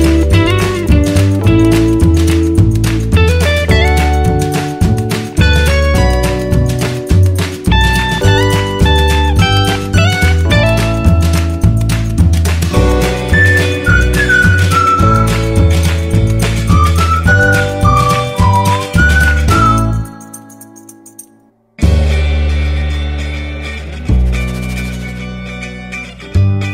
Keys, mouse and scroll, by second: 0.9-1.7 typing, 5.1-5.9 typing, 16.8-20.3 drag, 20.3-21.2 scroll down 1, 21.2 click.